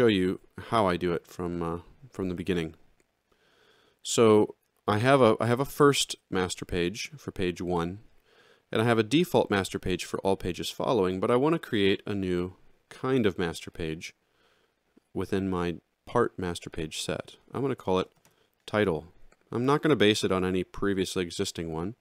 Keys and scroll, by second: 17.9 shift+t, 18.0 i.